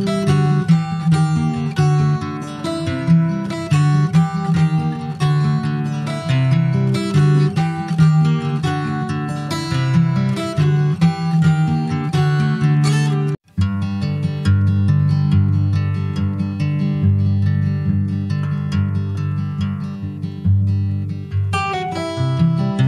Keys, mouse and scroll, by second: 0.0 click, 0.5 s, 2.1 click, 2.7 shift+middle click, 3.5 ctrl+s, 3.8 click, 5.8 alt+middle click, 6.1-7.0 alt+scroll up 4, 7.0 alt+z, 7.5 click, 8.8 click, 9.5 click, 11.5-11.9 alt+scroll up 1, 11.9 alt+z, 12.5 alt+middle click, 13.0-13.5 scroll up 3, 13.5 shift+middle click, 14.2 ctrl+s, 14.3 scroll up 3, 14.5 shift+middle click, 15.5 s, 17.1 click, 18.5 middle click, 19.1 s, 20.9-21.6 alt+scroll up 1, 21.6 alt+middle click, 22.7 click.